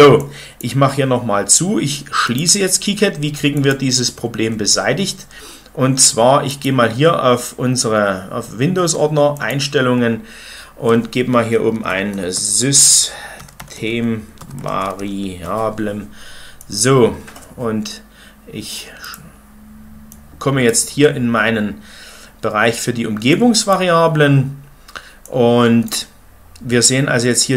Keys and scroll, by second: 11.7-15.3 typing.